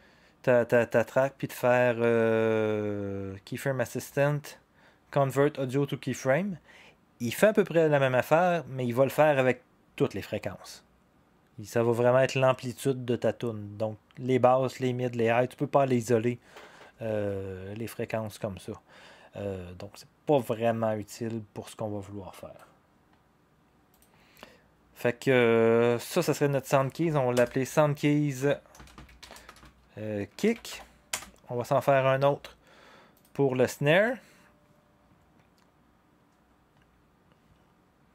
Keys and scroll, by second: 27.3 Return, 28.5-31.2 typing, 33.8 typing.